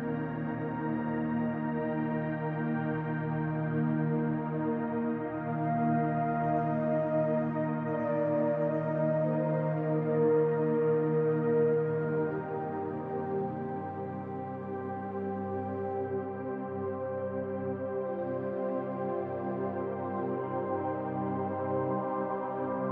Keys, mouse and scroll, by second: 1.5-3.6 drag, 1.5 scroll down 1, 2.1-2.5 scroll up 1, 5.9 scroll up 1, 8.0-10.0 drag, 10.2 click, 10.9-13.5 drag, 13.5 middle click, 14.0 click, 14.7 middle click, 15.0 click, 15.8 middle click, 16.2 click, 17.1 middle click, 17.5 click, 18.3 middle click, 18.6 click, 19.3 middle click, 19.6 click, 20.3 middle click, 20.6 click, 21.3 middle click, 21.8 click, 22.5 middle click, 22.8-22.9 drag.